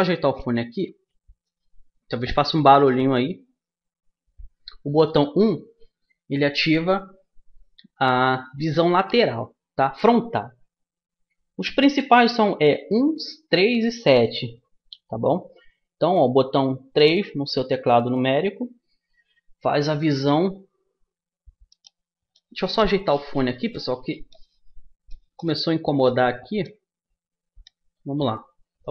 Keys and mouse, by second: 5.1 KP_1, 16.3 KP_3.